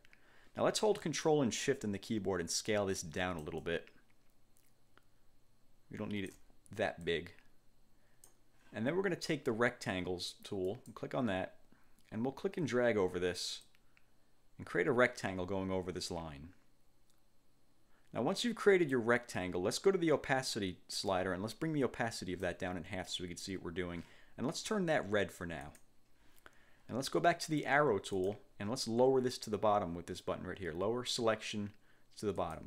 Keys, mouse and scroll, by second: 3.1-6.7 ctrl+shift+drag, 7.2-8.6 drag, 10.8 click, 13.8-19.3 drag, 21.2-22.7 drag, 25.8 click, 28.3 click, 32.5 click.